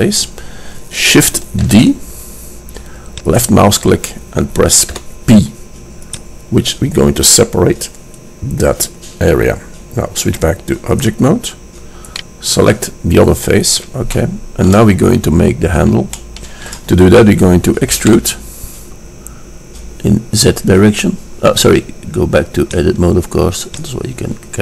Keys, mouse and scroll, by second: 2.2 shift+d, 5.0 p, 11.8 click, 12.4-13.9 drag, 14.0 middle click, 14.3-14.8 middle drag, 16.2 middle click, 18.0 middle click, 18.2 e, 24.1 click.